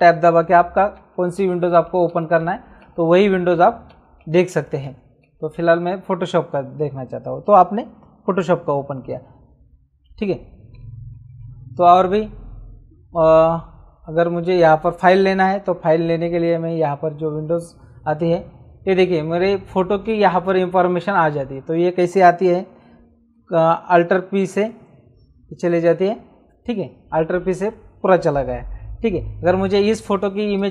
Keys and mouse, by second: 0.2 alt+Tab, 11.2 super+d, 16.7 click, 20.4 click, 24.7 p, 30.6 click.